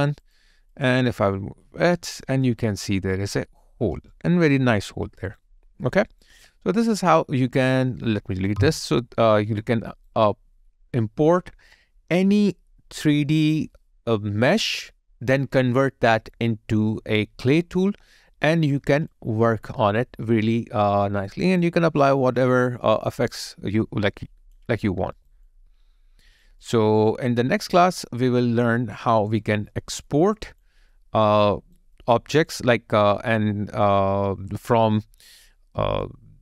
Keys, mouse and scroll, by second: 0.7 double click, 2.5 alt+click, 4.1 alt+right click, 5.6 alt+middle click, 6.1 alt+right click, 6.4 alt+click, 9.6 Delete, 9.9 alt+right click, 10.3 alt+middle click, 19.1 alt+click, 20.8 alt+right click, 22.1 alt+click, 23.0 alt+middle click, 23.4 alt+click, 25.2 alt+right click, 25.4 alt+click, 28.0 alt+click, 28.8 alt+right click, 29.7 alt+middle click, 30.3 alt+click, 30.9 alt+middle click, 31.5 alt+right click, 32.0 alt+middle click, 32.5 alt+click, 36.0 alt+click.